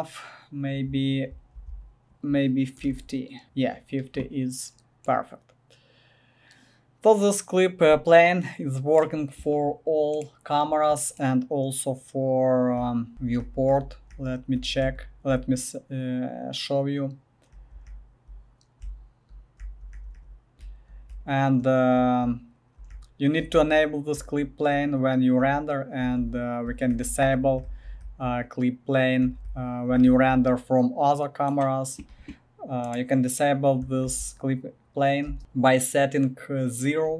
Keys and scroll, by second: 1.5 ctrl+v, 2.5-3.4 typing, 3.4 Left, 3.4 Return, 12.5-15.3 typing, 17.3-22.7 typing, 24.5-29.9 typing, 33.1 typing, 34.0 ctrl+v, 35.3 space.